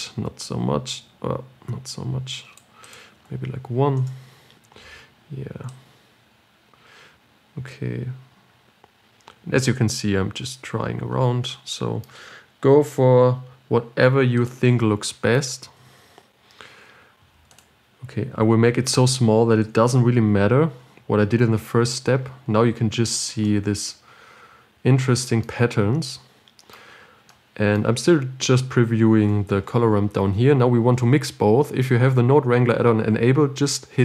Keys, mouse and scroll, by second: 4.3-13.6 drag, 16.4-21.6 drag, 21.6-22.5 scroll down 4, 22.5-22.8 scroll up 5, 23.2-23.6 scroll down 6, 23.9-26.2 middle drag, 26.2 scroll down 4, 29.6-34.0 middle drag.